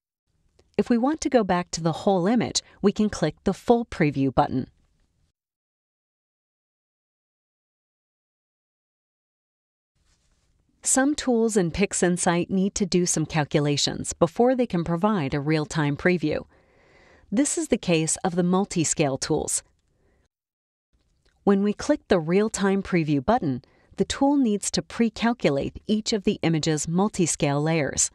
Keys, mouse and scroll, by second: 0.0 click, 5.4 click, 18.4 click, 21.7 click, 24.7 click.